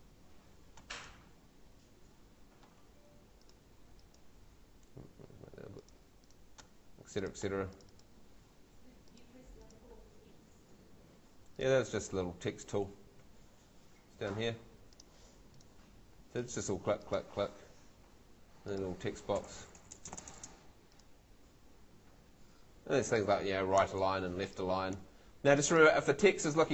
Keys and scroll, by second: 0.0-0.3 typing, 2.8 Escape, 10.7 Home, 12.0 Escape, 13.2 Escape, 19.2-20.2 typing, 22.5 Escape.